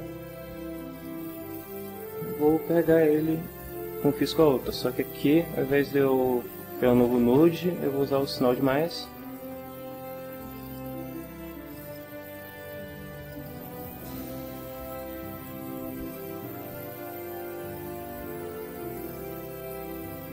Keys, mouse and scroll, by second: 0.9 click, 5.1 click, 8.5 click, 10.5 click, 11.7 click, 13.2 click, 15.5 f, 17.2 ctrl+middle click, 18.1-19.4 ctrl+middle drag.